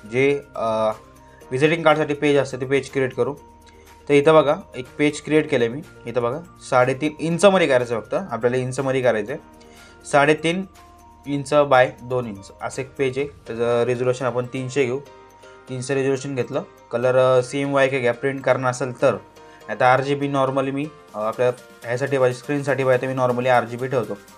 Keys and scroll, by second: 14.0 3, 14.2 0.